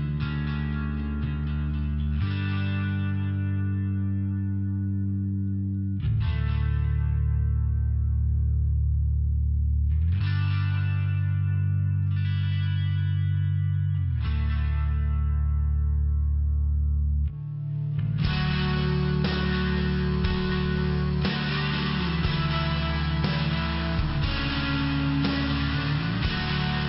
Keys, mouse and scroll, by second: 0.9 click, 1.7 click, 2.3 click, 2.9 click, 5.7 click, 7.3 click, 8.5 click, 12.7 click, 14.5 click, 16.9 click, 20.1 click, 21.5 click, 23.3 click, 23.8 click, 25.3 click.